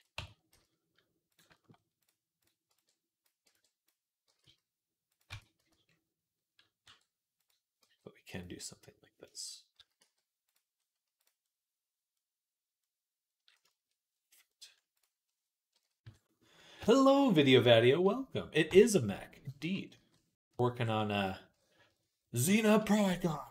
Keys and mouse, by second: 0.0 Tab, 0.3 z, 1.2 shift+click, 1.5 middle click, 1.5 right click, 2.2 click, 2.2 middle click, 2.2 right click, 2.5 b, 2.8-9.6 middle drag, 3.3 b, 4.1 g, 5.1 Tab, 5.4 z, 6.7 r, 7.6 g, 9.6 s, 10.6 middle click, 11.6 middle click, 12.0 click, 13.1-14.4 middle drag, 15.8-19.0 middle drag, 15.8 KP_3, 20.6-23.5 middle drag, 23.1 shift+c.